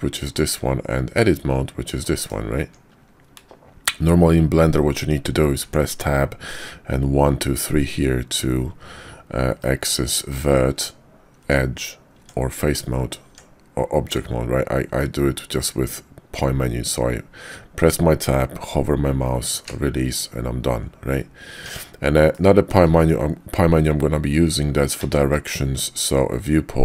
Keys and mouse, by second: 0.6 Tab, 2.0 click, 2.5 Tab, 5.6 Tab, 10.7 Tab, 11.4 Tab, 12.2 Tab, 13.3 Tab, 15.0-15.7 middle drag, 16.7 Tab, 21.5 Tab, 22.3-22.7 drag, 25.0 `.